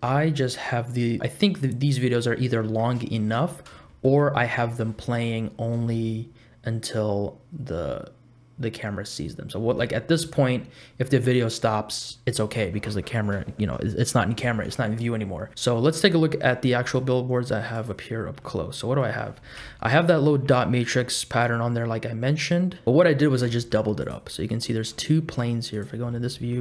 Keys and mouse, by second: 0.1 space, 1.3 space, 3.0 shift+middle click, 3.8 shift+middle click, 5.8 space, 9.7 space, 14.5 space, 15.5 click, 15.5 KP_Decimal, 16.8 click, 17.8 click, 18.5 middle click, 19.6 KP_Decimal, 20.3 middle click, 23.2 shift+middle click, 23.5 middle click, 24.1 click, 24.6 middle click, 25.7 click, 26.1 middle click.